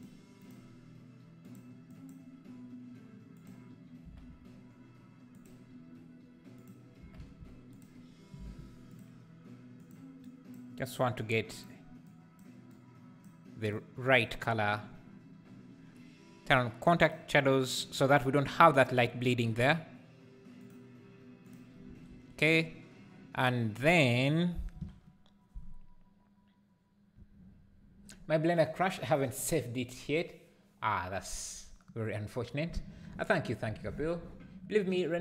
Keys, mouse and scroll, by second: 1.4 click, 5.3 KP_0, 9.8 click, 17.0 click, 17.6 click, 21.4 click.